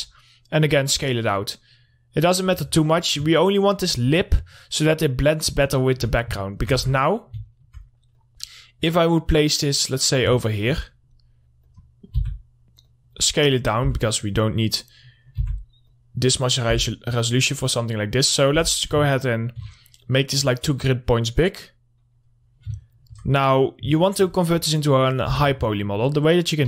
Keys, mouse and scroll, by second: 0.4-3.2 drag, 3.2 alt+middle click, 4.5-6.9 drag, 6.9 alt+middle click, 7.3 Tab, 7.4 scroll down 1, 7.6 middle click, 8.6-10.8 drag, 10.8 alt+middle click, 12.1 click, 12.6 r, 13.3 click, 14.3 w, 14.4 middle click, 14.9 scroll up 1, 15.2 click, 15.9 r, 16.3 click, 17.2 w, 17.8 click, 19.0 z, 19.5 alt+middle click, 20.5-23.3 drag, 23.3 alt+middle click, 23.7-24.1 scroll up 1, 24.1 click, 24.5 alt+middle click, 25.8 Tab.